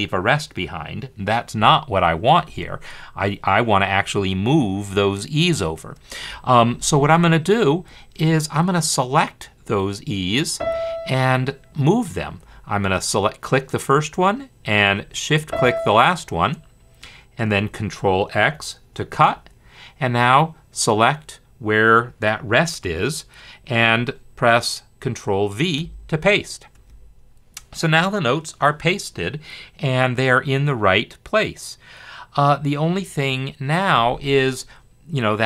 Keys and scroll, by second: 18.4 ctrl+x, 25.8 ctrl+v.